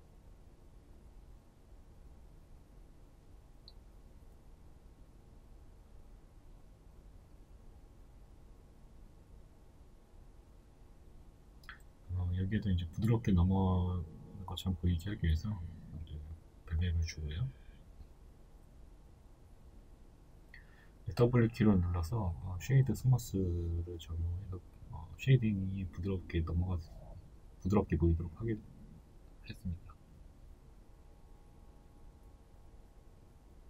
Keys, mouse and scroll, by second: 1.4 KP_3, 5.0 right click, 5.4-12.4 middle drag, 5.7 Tab, 6.5 a, 8.7 ctrl+b, 12.4 click, 12.7-16.0 middle drag, 14.5 Tab, 16.0 right click, 16.4-24.4 middle drag, 18.4 z, 23.4 w, 24.4 right drag, 24.8-26.6 middle drag, 25.7 s, 26.6 right click, 28.2 w, 28.6 scroll down 1, 29.1-33.6 middle drag, 29.7 scroll up 1, 30.6-31.0 scroll down 2, 33.0 KP_1.